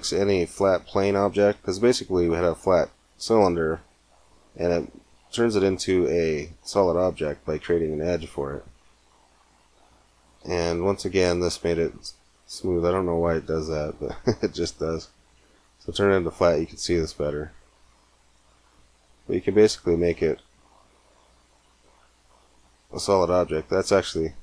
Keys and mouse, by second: 6.5-8.3 drag, 8.3 middle click, 10.7 Tab, 13.2 Tab, 16.9-18.9 drag, 19.6 click, 19.9 middle click, 19.9 click, 20.0-21.6 middle drag, 23.1-24.4 middle drag.